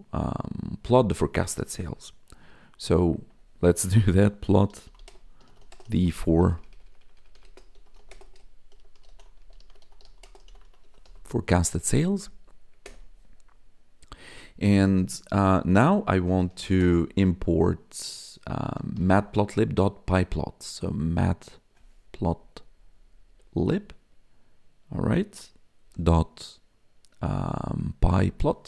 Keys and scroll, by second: 3.0 ctrl+/, 4.1-11.5 typing, 12.8 Return, 15.8-17.0 typing, 18.6-19.6 typing, 22.2 Down, 25.4 Tab, 25.8 ., 28.1 p.